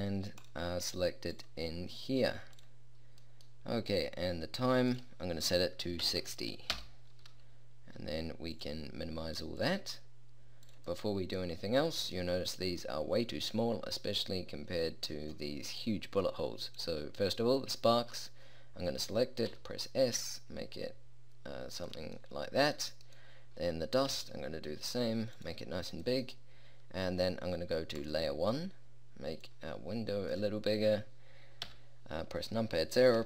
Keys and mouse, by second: 11.1 middle click, 14.3-15.6 middle drag, 16.7-19.5 middle drag, 19.6 s, 22.4-24.3 drag, 24.2 s, 31.7 KP_0.